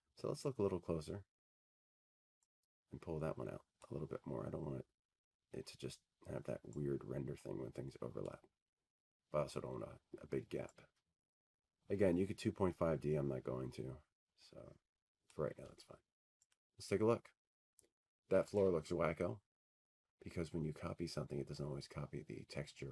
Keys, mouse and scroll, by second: 2.1 click, 3.8 click, 6.4-8.0 scroll, 8.0-8.8 scroll, 9.4 click, 9.7-11.1 scroll, 13.8 click, 14.0-14.8 scroll, 14.8-15.9 scroll, 20.9 click, 22.2 click.